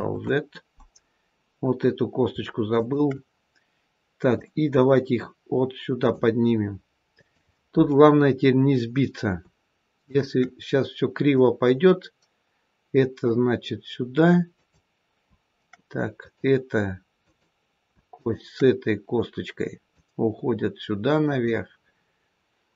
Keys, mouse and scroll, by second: 2.6 shift+click, 4.2 click, 7.1 click, 10.0 shift+click, 11.2 click, 14.4 click, 16.1 click, 17.1 click, 18.0 shift+click, 19.8 click.